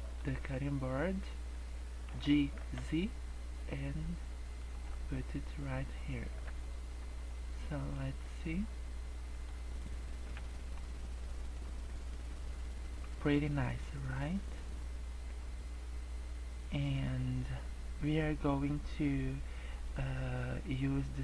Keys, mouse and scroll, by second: 0.0 click, 0.9 scroll up 3, 2.1 g, 4.8 scroll down 4, 5.1 middle click, 6.3 KP_0, 6.9 scroll down 2, 7.1-8.1 scroll up 8, 8.3-8.9 scroll down 2, 9.3 click, 11.5 scroll up 1, 12.7-13.1 scroll down 4, 13.1 scroll up 2.